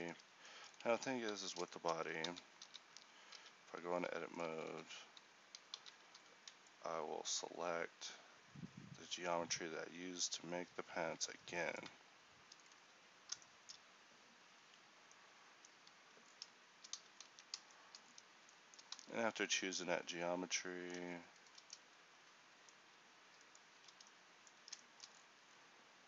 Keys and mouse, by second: 0.9 Tab, 1.4 z, 2.3 ctrl+z, 3.5 a, 4.7 z, 6.2 a, 14.7 c, 18.2 middle click, 19.1 z, 22.4-26.0 middle drag.